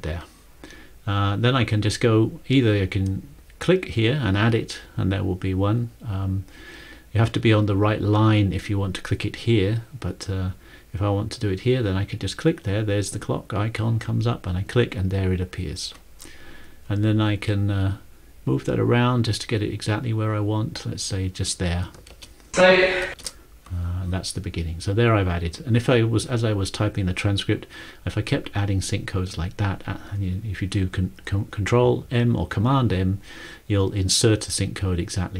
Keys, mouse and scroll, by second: 14.0 click, 22.2 ctrl+shift+,, 23.1 ctrl+shift+,, 25.3 ctrl+shift+,.